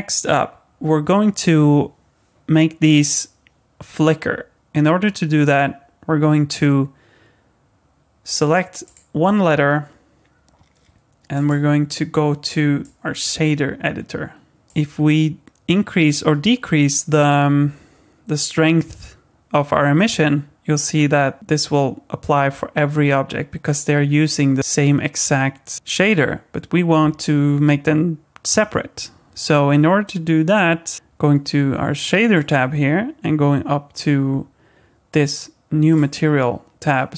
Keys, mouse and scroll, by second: 8.2 click, 8.8 click, 11.3 click, 14.2 click, 14.6 shift+middle click, 16.1 click, 30.9 ctrl+z, 30.9 click, 32.3 click, 35.9-37.1 click.